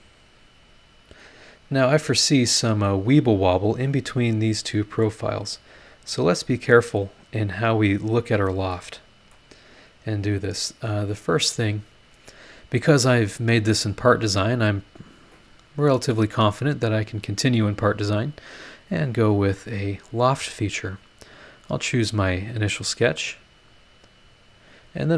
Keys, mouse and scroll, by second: 0.9 click, 1.7 scroll down 1, 1.9-3.0 middle drag, 2.0-3.0 drag, 2.0-3.0 right drag, 3.7 click, 4.6 click, 5.4 click, 6.1 click, 6.9 click, 8.0 scroll up 2, 8.3 scroll down 2, 8.7 middle click, 8.8 click, 9.6-10.4 scroll up 4, 10.5 middle click, 12.1 click, 19.7 click, 21.2 click, 24.3 click.